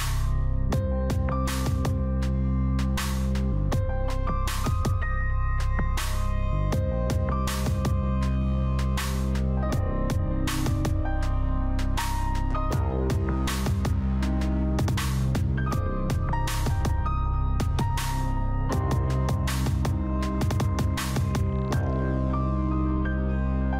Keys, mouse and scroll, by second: 0.1-2.8 middle drag, 2.8 scroll up 1, 3.7 click, 6.0 scroll down 1, 6.2 scroll up 1, 7.2 click, 9.9-10.6 scroll down 1, 12.2-23.7 drag.